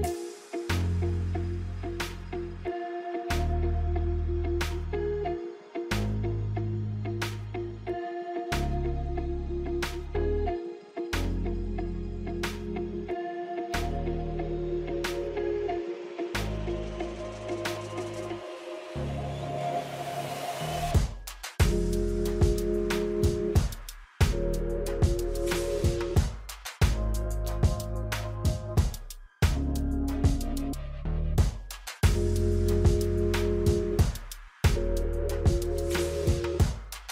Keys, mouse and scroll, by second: 2.7 click, 4.6-9.4 drag, 12.0-12.8 alt+scroll down 3, 14.3 alt+scroll down 1, 16.1 scroll up 2, 16.8 space, 16.9 click, 17.2 space, 18.9 click, 20.8-23.9 drag, 26.2 alt+scroll down 1, 29.1 scroll up 1, 30.4 F9, 30.7 alt+scroll up 2, 31.2 space, 31.3 click, 31.5 space, 32.5 click, 35.6-37.1 drag.